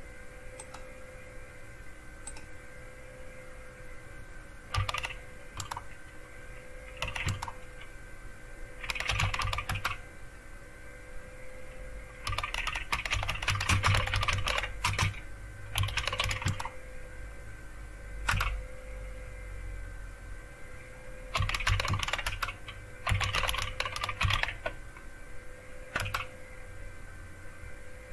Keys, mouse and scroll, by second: 0.6 click, 2.2 click, 4.5-5.4 typing, 5.5 Tab, 6.7-10.3 typing, 12.0-16.7 typing, 18.3 Return, 21.1-24.8 typing, 25.9-26.7 typing.